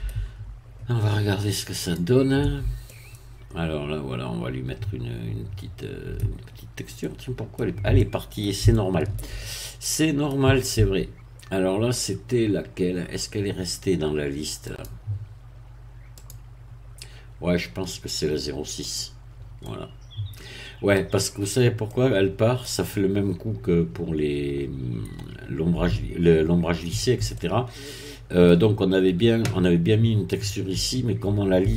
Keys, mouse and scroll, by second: 1.8 click, 2.4 Tab, 2.9-6.3 middle drag, 6.6-7.0 scroll up 2, 7.0-8.6 middle drag, 8.7 shift+middle click, 9.5-10.5 shift+middle drag, 10.8 Tab, 14.7 click, 16.1 click, 18.9 click, 19.6-21.1 middle drag, 21.3-21.9 scroll up 1, 21.9 middle click, 27.3-28.6 middle drag.